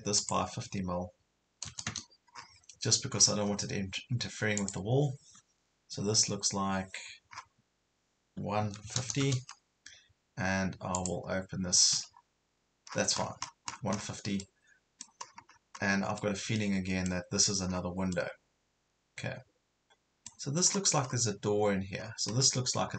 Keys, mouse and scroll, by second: 0.2 click, 1.6 KP_5, 1.7 KP_0, 2.4 scroll down 1, 3.1-3.6 scroll up 1, 4.6 click, 8.6 KP_1, 8.9 KP_5, 9.0 KP_0, 11.0 click, 11.7 Escape, 12.2-12.5 scroll up 1, 12.9 scroll down 1, 13.0 Escape, 14.4 middle click, 15.2 scroll down 1, 16.2 middle click, 17.7 scroll down 1, 18.2-20.7 middle drag, 20.7 scroll up 1, 22.0 scroll down 1.